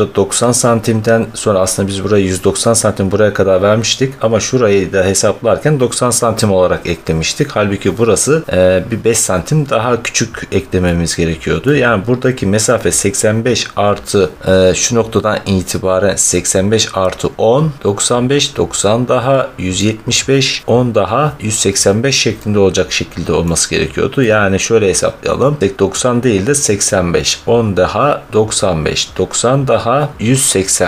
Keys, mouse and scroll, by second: 3.5 middle click, 4.0 middle click, 8.4 middle click, 11.7 middle click, 12.0 middle click, 12.1 middle click, 15.6 scroll, 19.6 middle click, 20.2-22.7 middle drag, 22.5-22.9 scroll, 23.3 middle click, 24.6 middle click, 25.4 scroll.